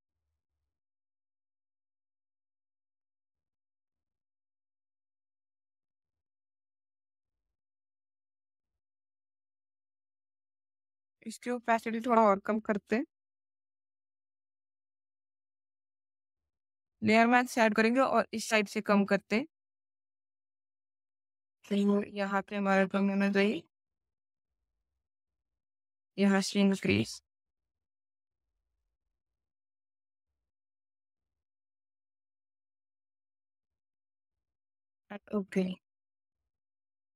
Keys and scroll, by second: 0.1 v, 4.5 Down, 4.6 Down, 4.7 Down, 4.9 Up, 5.0 Up, 5.2 Right, 5.3 Up, 5.5 Down, 20.1 b, 22.5 x, 26.3 x, 35.7 space.